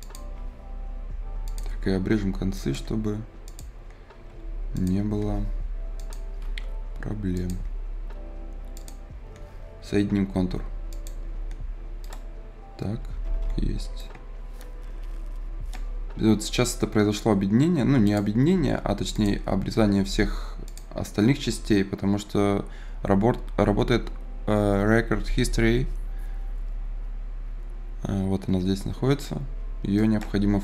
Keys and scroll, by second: 4.2 Escape, 12.9 Escape, 18.6 Escape, 19.6 Escape, 21.4 Escape, 30.4 Escape.